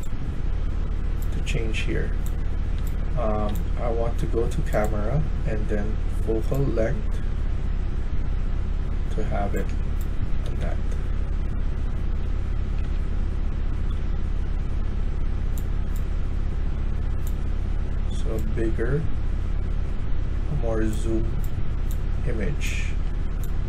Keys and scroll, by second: 1.1-1.5 typing, 2.7 d, 3.3 d, 10.1 typing, 11.8-14.7 typing.